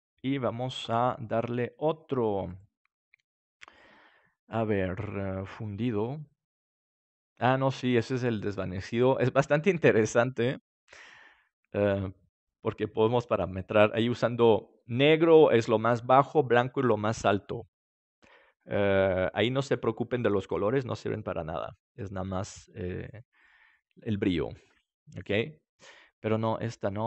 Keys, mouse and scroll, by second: 6.9-10.1 middle drag.